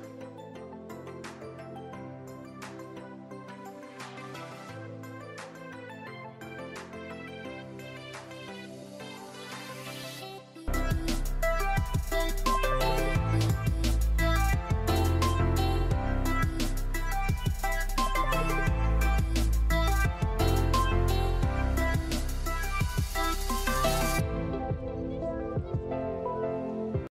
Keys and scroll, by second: 3.0 ctrl+s.